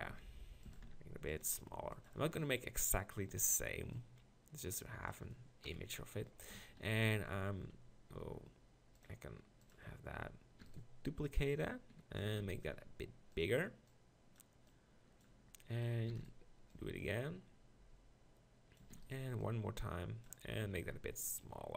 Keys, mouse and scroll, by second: 0.1 s, 0.7 s, 1.4 g, 2.0-3.2 drag, 3.2 middle click, 4.0-5.1 drag, 5.6 KP_1, 6.6 Tab, 6.9 z, 10.6 shift+d, 12.2 s, 12.4 click, 14.7 click, 16.1 shift+d, 18.9 shift+d, 20.6 s.